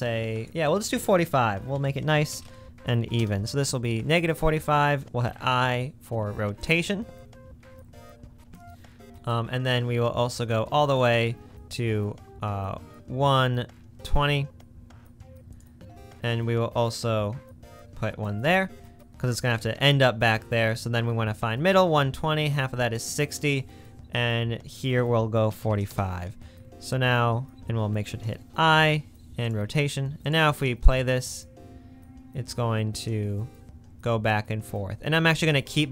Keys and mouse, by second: 20.5-21.6 drag, 30.7 space.